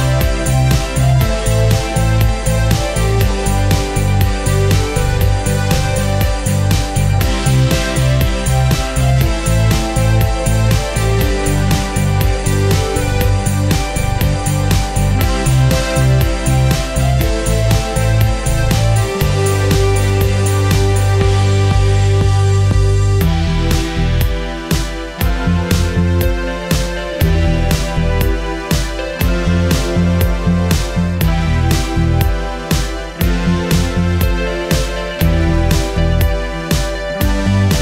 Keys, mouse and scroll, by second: 3.9 ctrl+space, 4.1 click, 4.8 scroll up 1, 5.1 click, 8.2 right click, 9.5 click, 9.8 scroll down 1, 10.2 click, 16.1-16.7 scroll up 1, 16.7-18.6 drag, 19.2 scroll down 1, 20.5 click, 21.3-21.9 scroll up 1, 22.0 shift+click, 23.0 e, 23.5 click, 23.9 scroll down 1, 24.4 click, 25.3 c, 25.5 click, 28.2 ctrl+q, 28.8-29.2 scroll up 1, 30.2 click, 32.2 right click, 33.7-37.8 drag.